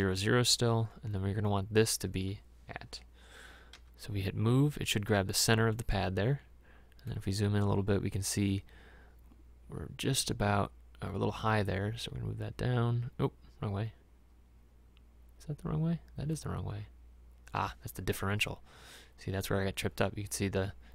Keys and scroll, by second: 3.8 m, 19.7 Escape.